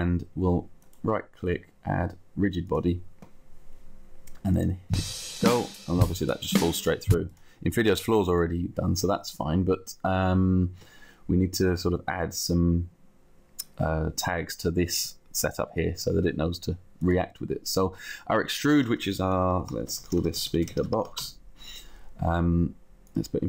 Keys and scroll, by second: 19.5-20.8 typing, 21.4 Return, 22.4 Return.